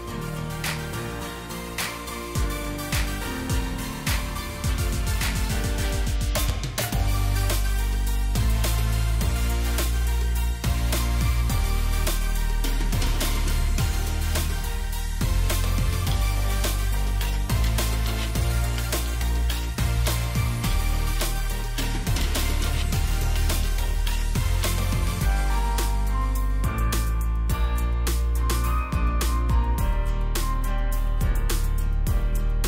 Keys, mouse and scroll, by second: 0.2 scroll down 1, 0.8 space, 2.2 alt+click, 5.8 ctrl+d, 5.9 ctrl+d, 6.8 ctrl+d, 7.7 ctrl+d, 16.8 ctrl+g, 18.0 ctrl+g, 22.6 ctrl+g, 29.1 ctrl+g, 29.5-29.9 alt+scroll down 1, 30.7 scroll up 1.